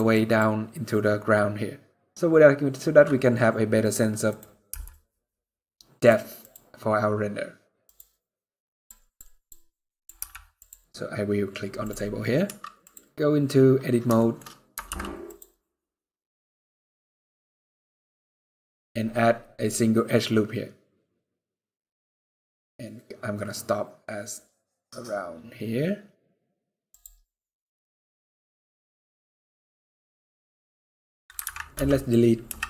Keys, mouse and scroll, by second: 3.9 click, 4.4 n, 5.6-9.6 click, 9.9 n, 10.3 click, 10.6-11.0 scroll down 7, 11.5 click, 11.5 scroll down 1, 11.8-12.7 scroll up 3, 12.1 Tab, 13.8 shift+middle click, 14.1 scroll up 2, 14.6 ctrl+r, 26.9 scroll up 1, 28.7 scroll down 1, 28.8-29.1 scroll down 9, 29.7 middle click, 29.7-30.5 scroll down 4, 31.1 alt+a, 31.4 b, 32.1 x.